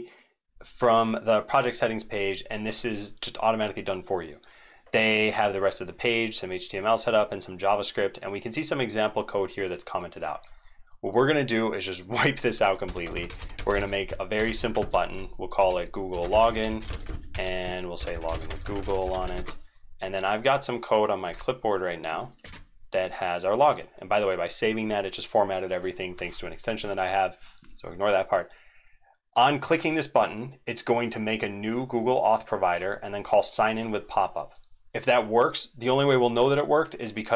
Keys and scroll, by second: 21.3 ctrl+v, 22.4 ctrl+s.